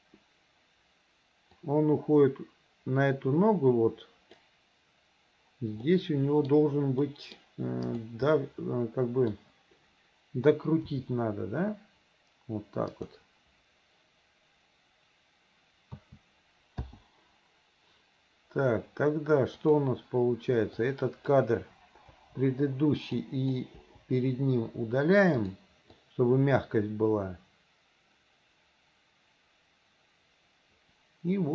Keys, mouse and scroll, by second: 1.6-4.4 drag, 5.9 middle click, 7.1 middle click, 7.9 click, 8.3-9.3 middle drag, 10.9 r, 16.0 a, 16.9 i, 19.7 click, 20.9 click, 22.2 Delete, 23.2-23.6 drag, 23.8 Delete, 25.5 click, 26.0-31.5 drag.